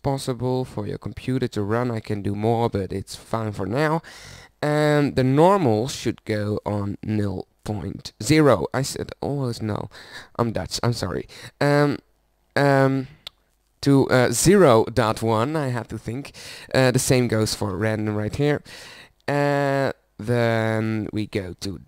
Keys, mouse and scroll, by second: 2.8-15.7 middle drag.